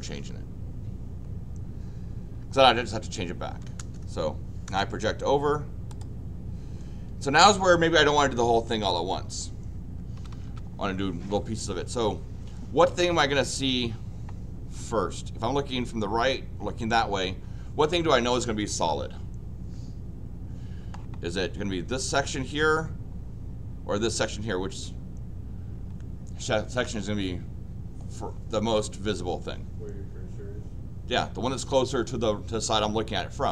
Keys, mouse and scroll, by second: 3.5 l, 4.7 Return, 5.9 click, 10.2 Escape, 10.3 Escape, 10.4 Escape.